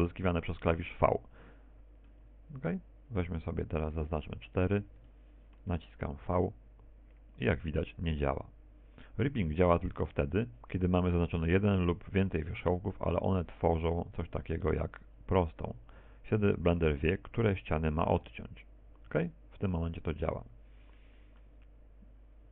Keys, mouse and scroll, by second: 0.2 middle click, 3.5 middle click, 4.8 right click, 5.4 shift+right click, 6.0 right click, 6.7 shift+right click, 7.1 middle click, 8.2 v, 15.3 right click, 16.2 shift+right click, 16.6 middle click, 20.2 v.